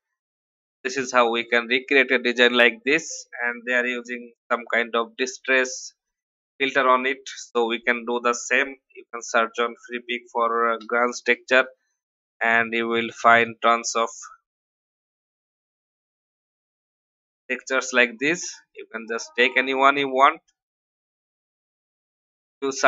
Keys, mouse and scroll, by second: 5.9-6.4 alt+scroll up 1, 7.6 scroll up 1, 8.4 scroll down 1, 10.7 ctrl+o, 13.3 click.